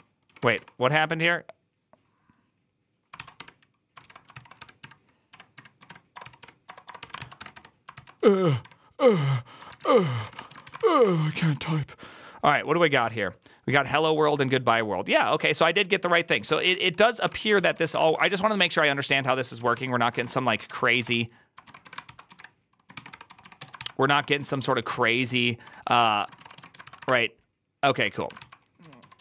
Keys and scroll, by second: 0.0-0.9 typing, 2.8-10.6 typing, 3.9 ctrl+c, 3.9 ctrl+}, 10.6 ctrl+c, 10.8 Up, 10.9 Return, 16.2 ctrl+a, 16.4-26.6 typing, 16.6 ctrl+c, 16.7 ctrl+c, 20.7 ctrl+c, 20.8 Up, 26.7 ctrl+c, 26.8 Up, 26.9 Return, 28.0 ctrl+a, 28.1-29.2 typing, 28.3 ctrl+c.